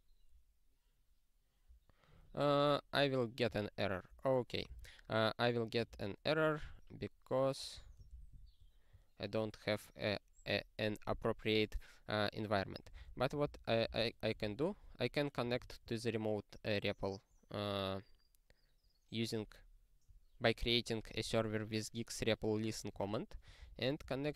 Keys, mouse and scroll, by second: 1.7 click, 1.9 click, 3.4 q, 4.2 click, 4.7 super+t, 5.9 ctrl+p, 6.7 Return, 7.7 super+o, 8.3 ctrl+z, 14.4 super+w, 15.5 super+o, 24.1 super+o.